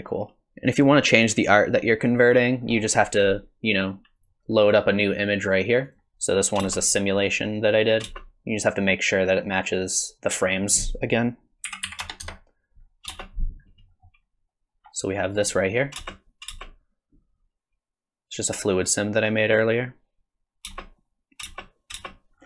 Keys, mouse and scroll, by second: 2.7-3.5 scroll up 3, 4.2 click, 6.7 space, 8.0 space, 10.6 click.